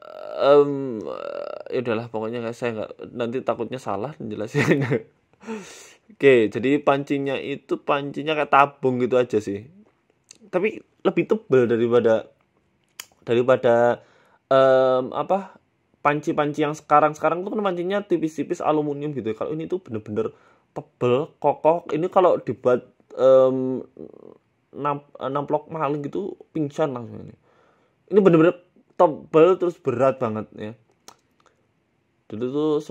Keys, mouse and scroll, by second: 2.1 s, 3.0 s, 3.7 ctrl+b, 9.4-9.9 scroll up 3, 9.8 click, 11.4 ctrl+b, 15.8 Tab, 16.2 Tab, 16.5 shift+middle click, 17.4 click, 18.5 ctrl+b, 22.8 scroll up 6, 23.0 shift+middle click, 24.4 e, 24.8 s, 25.7 middle click, 26.5 KP_Decimal, 27.1 middle click, 27.9 ctrl+r, 29.5 g, 30.8 KP_1, 31.1-31.5 scroll up 6, 31.9 ctrl+b, 32.7 scroll down 1.